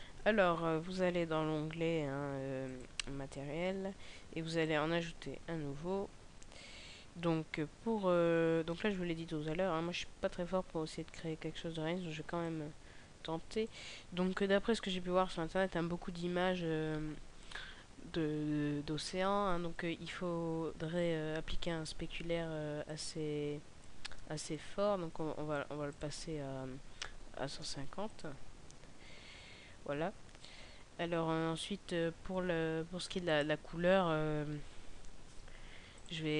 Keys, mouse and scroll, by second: 2.5 click, 12.4 click, 22.8 click, 33.1 click, 35.8 click.